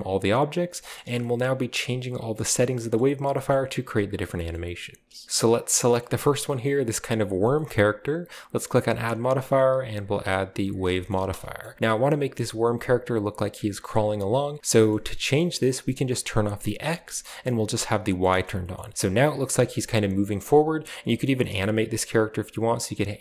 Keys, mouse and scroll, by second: 0.6 right click, 0.9 shift+middle click, 1.1 a, 2.9 shift+middle click, 3.2 middle drag, 3.2-4.1 scroll up 1, 3.5 middle click, 4.3 shift+middle drag, 4.5-5.2 shift+middle drag, 5.2 ctrl+w, 5.2 middle click, 5.2-6.0 scroll up 1, 6.0 shift+middle drag, 6.0-7.2 scroll up 1, 6.4 shift+middle click, 6.6 middle click, 7.4 shift+middle drag, 7.7-8.5 middle drag, 8.5 click, 9.4 typing, 10.6 click, 11.1 shift+middle click, 11.1 typing, 11.6 middle click, 11.7 shift+scroll up 1, 12.7-13.9 scroll up 2, 13.9-14.6 scroll down 3, 14.6-16.1 middle drag, 14.6-15.1 scroll up 2, 16.7 click, 18.3 shift+scroll up 1, 18.9 shift+scroll down 1, 19.5 shift+g, 20.7 right click, 20.7 scroll down 1, 21.0 typing.